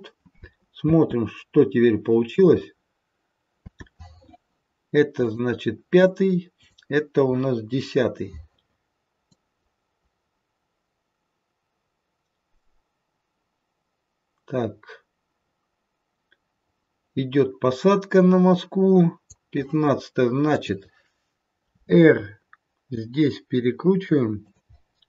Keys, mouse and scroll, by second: 0.8 space, 3.5 space, 5.2 click, 6.5 click, 9.3 click, 20.5 click, 21.6 r.